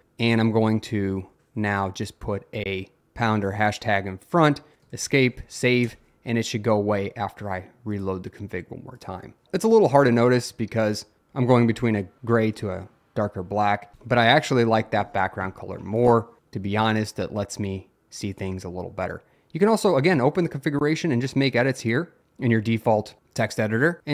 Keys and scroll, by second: 0.5 Right, 1.9 Left, 3.0 shift+#, 4.7 Escape, 4.7-5.6 typing, 5.9 Return.